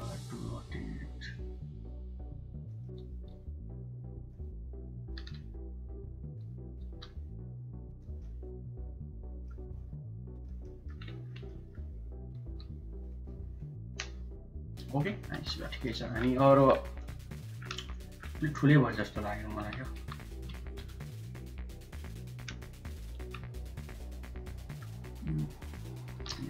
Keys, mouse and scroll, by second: 1.7 r, 3.1 g, 4.9 g, 6.7 g, 8.0-9.4 middle drag, 9.6 r, 10.4 middle click, 11.3 middle click, 12.3 g, 15.2 Tab, 15.5 middle click, 16.2 middle click, 16.9 click, 17.1 middle click, 18.2 Tab, 18.7 click, 19.8 1, 20.4 shift+z, 20.9 click, 23.7 click, 24.1 shift+click, 24.4 shift+middle click, 25.4 shift+click.